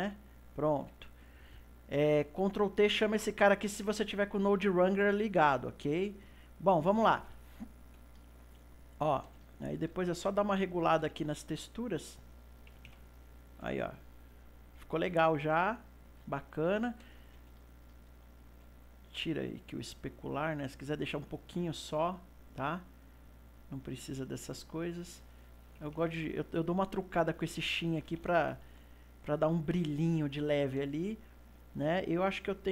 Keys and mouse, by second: 0.0 click, 0.8 n, 2.4 click, 3.9-12.0 middle drag, 12.0-13.8 drag, 13.8-19.0 ctrl+middle drag, 19.0-22.0 drag, 22.3-29.0 drag, 29.0-32.7 ctrl+middle drag.